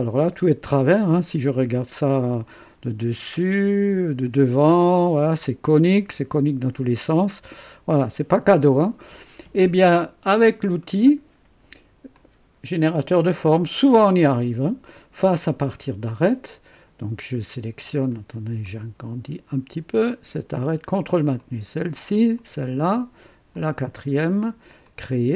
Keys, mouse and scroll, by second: 1.5 KP_2, 2.4-3.5 right drag, 3.6 KP_1, 6.1 KP_3, 7.3 KP_1, 9.8-10.5 drag, 10.8-11.4 right drag, 12.1 click, 15.5 click, 18.1 scroll up 1, 18.6 right click, 20.0 click, 21.3 ctrl+click, 22.3 ctrl+click, 23.5 ctrl+click, 24.8 click.